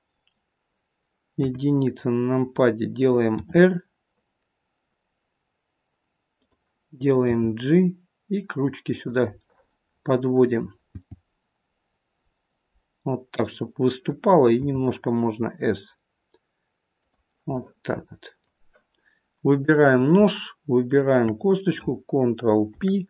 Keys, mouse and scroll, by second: 16.8 click.